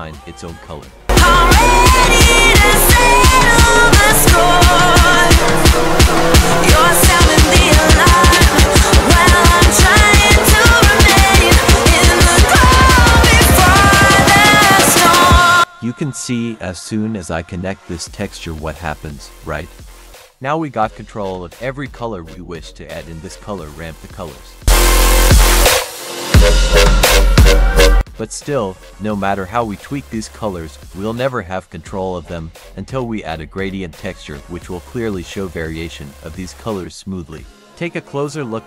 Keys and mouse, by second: 3.4-4.4 drag, 6.2 F3, 12.8 click, 13.6 click, 20.1-23.7 drag, 24.6 click, 24.9-26.9 drag, 28.6 drag, 29.2-29.8 drag, 30.2 drag, 30.7-31.1 drag, 32.9 drag, 33.4-34.1 drag, 34.9-36.2 drag.